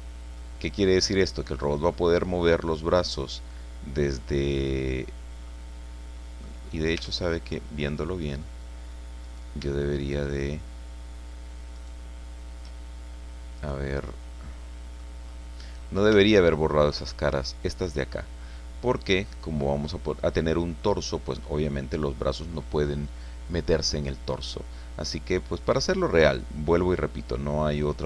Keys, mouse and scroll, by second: 0.3 click, 0.6-1.4 scroll up 2, 1.9-3.3 drag, 4.2-5.6 drag, 6.1 middle click, 6.7 scroll up 2, 7.0 Tab, 7.5-7.9 scroll up 2, 8.0 middle click, 9.2 right click, 9.9 shift+right click, 11.7 shift+right click, 13.6 right click, 14.0-15.2 middle drag, 15.2-15.7 scroll up 1, 15.7-17.0 middle drag, 17.0 shift+middle click, 18.6-19.5 scroll down 4, 19.8-21.5 drag, 21.6-22.7 scroll up 6, 27.7 right click.